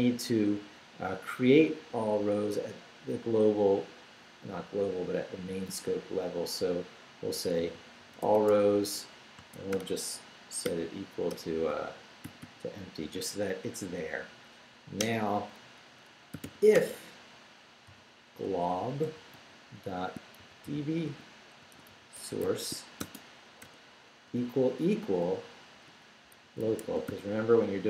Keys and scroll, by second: 7.2-12.2 typing, 15.0 Return, 16.1-16.9 typing, 18.1-19.1 typing, 20.2-23.6 typing, 25.1-27.8 typing.